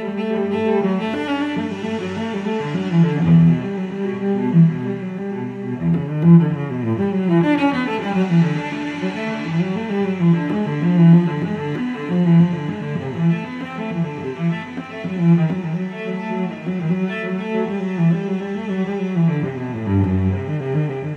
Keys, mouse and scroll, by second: 0.0 0, 0.6 click, 1.2 0, 3.1 click, 5.2 click, 6.6 5, 7.8 0, 8.5 click, 11.4-11.8 scroll down 2, 12.2 scroll up 2, 15.8 click, 19.0 click, 20.5 ctrl+click.